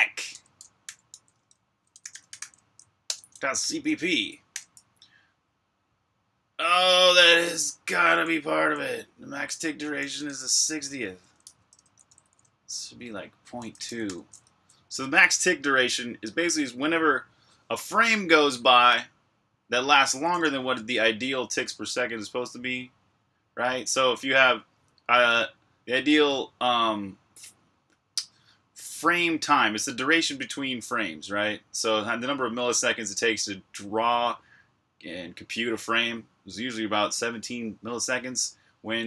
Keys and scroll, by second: 0.0-2.9 typing, 4.4 typing, 8.1-8.5 typing, 9.5-14.2 typing, 20.3 Escape, 20.7 typing, 38.7-39.0 typing.